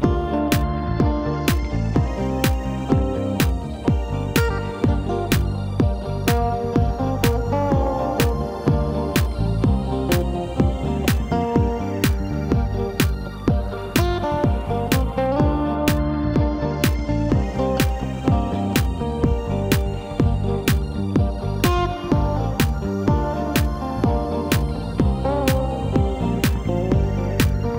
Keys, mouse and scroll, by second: 1.6-2.0 scroll up 2, 2.0 scroll down 2, 2.3-5.3 middle drag, 5.4 3, 5.8 scroll up 2, 7.8 e, 12.6 scroll down 4, 13.6-14.1 scroll up 4, 14.4 scroll up 6, 17.4 ctrl+r, 22.2 3, 23.3 click.